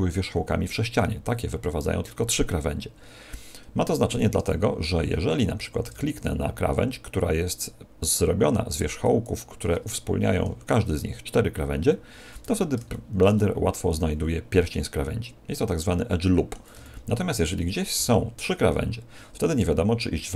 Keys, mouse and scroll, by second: 4.1 a, 9.0 alt+shift+right click, 12.4 z, 12.9 shift+middle click, 13.3 middle click, 16.7 a, 17.9 z.